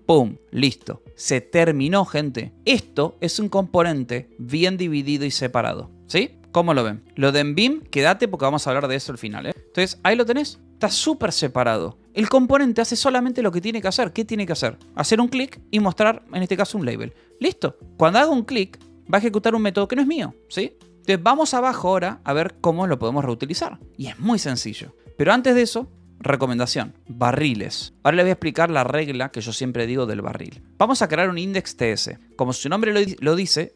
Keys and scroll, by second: 0.3 ctrl+s, 2.2-6.4 typing, 7.1 Escape, 7.9-10.1 typing, 10.7 Escape, 12.1 k, 13.2 shift+v, 14.5 Escape, 15.3 shift+v, 15.4 Escape, 16.1 j, 16.9 Escape, 17.8 k, 18.4 j, 18.9 j, 19.6 Escape, 22.8 j, 25.9 =, 27.6-31.0 typing, 32.2 Escape, 32.3 h, 33.2 shift+n, 33.3 Escape.